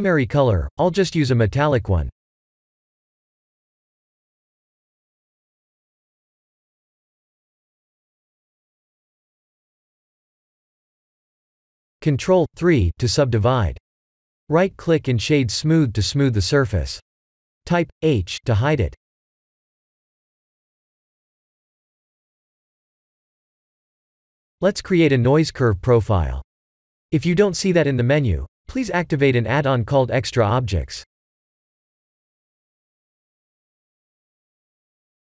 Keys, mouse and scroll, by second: 1.7-3.0 scroll down 5, 3.0-5.4 drag, 6.3-9.6 drag, 10.0-12.2 middle drag, 12.4 Tab, 12.8 ctrl+3, 13.2-13.9 middle drag, 15.2-17.1 right drag, 17.6-20.9 middle drag, 21.6 h, 22.3-23.1 scroll down 2, 24.0 shift+a.